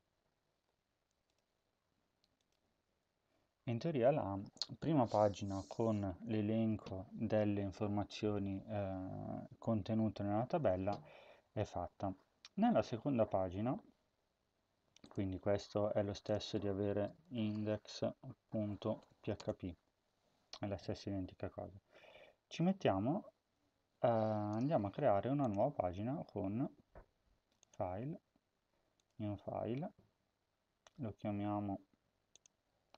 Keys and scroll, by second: 16.7-19.5 typing.